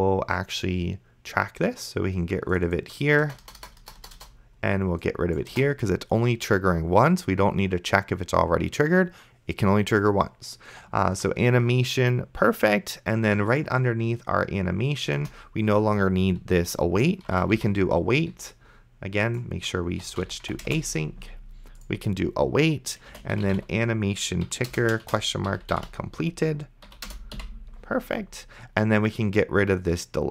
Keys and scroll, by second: 3.5 BackSpace, 15.3 Return, 17.1 a, 17.6 i, 18.3 t, 19.8-21.0 typing, 23.0-27.4 typing, 24.5 Down, 24.7 Return, 26.9 Down, 27.1 Return.